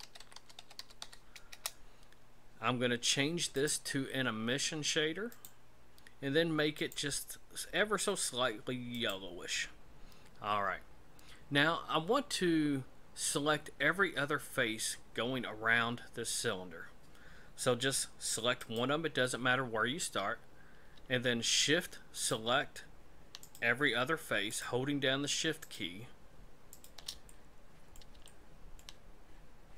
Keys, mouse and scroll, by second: 3.6 click, 6.8 click, 18.6 right click, 22.2-27.0 shift+right click, 27.3 middle click, 28.2 shift+middle click.